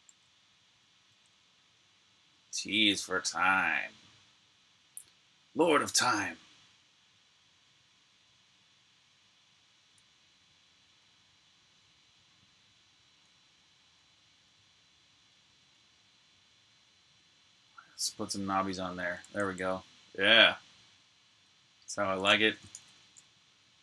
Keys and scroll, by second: 0.0 typing, 1.1 typing, 19.2 super+s, 21.2 super+Tab, 22.4-23.8 typing.